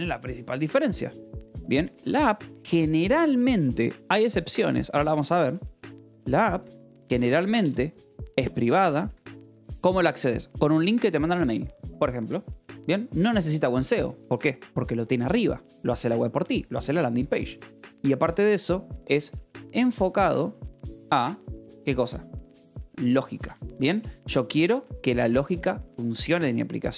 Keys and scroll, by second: 0.5-2.9 typing, 4.1 Escape, 4.3 o, 5.3 Tab, 5.7-9.1 typing, 6.5 Escape, 12.5 o, 12.9 :, 13.2 space, 13.7 Escape, 17.4 a, 18.9-21.1 typing, 22.5-25.4 typing.